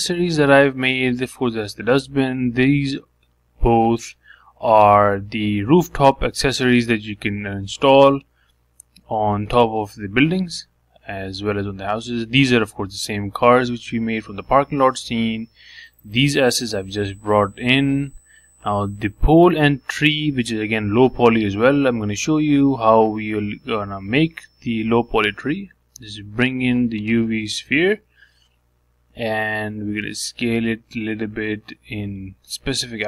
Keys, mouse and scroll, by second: 0.3-0.8 scroll down 1, 0.8 middle click, 1.6 click, 2.0-3.4 middle drag, 3.4 click, 3.8 shift+click, 4.2 shift+click, 4.9-6.2 middle drag, 6.2 click, 6.6 shift+click, 7.1 shift+click, 7.8 click, 8.1 middle click, 8.9-9.6 scroll down 2, 9.6 shift+middle click, 10.1-10.5 scroll down 1, 10.5 shift+middle click, 10.8 scroll down 3, 11.1-13.1 shift+middle drag, 14.4 shift+middle click, 15.1-15.4 scroll down 1, 15.4-17.5 shift+middle drag, 17.7 shift+middle click, 18.3 scroll down 2, 18.5-20.2 shift+middle drag, 20.2 click, 20.9 click, 21.5 shift+click, 22.0 middle click, 22.9 click, 24.9 shift+right click, 25.6 shift+a, 28.4 g, 30.8 s.